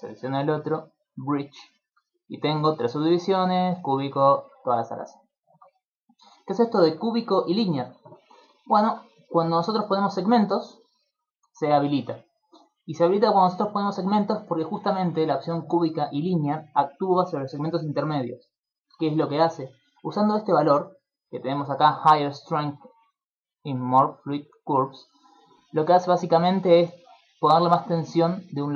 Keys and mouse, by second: 0.8 click, 1.8 middle click, 4.6 middle click, 6.8 click, 8.6 middle click, 10.0 click, 10.2 click, 11.3 click, 11.8 click, 15.2 click, 18.4 middle click.